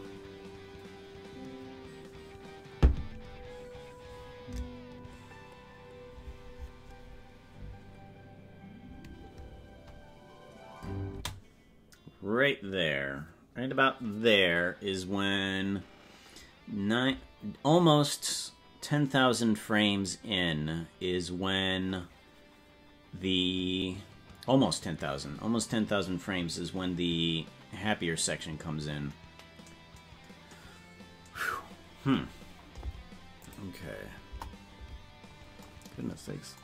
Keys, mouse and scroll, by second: 11.3 space, 33.5 click, 34.3 KP_0.